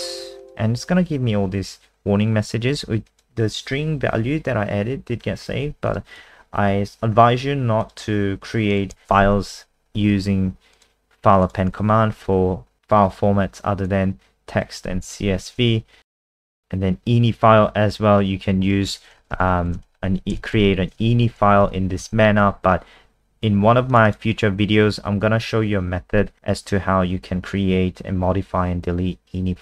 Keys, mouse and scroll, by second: 0.4 click, 6.2 ctrl+w, 7.8 click, 9.0 shift+Home, 9.1 ctrl+c, 10.8 click, 15.1 shift+Home, 16.4 ctrl+v, 19.1-20.5 typing, 21.6 ctrl+s, 22.0 F5, 23.9 click, 24.1 click.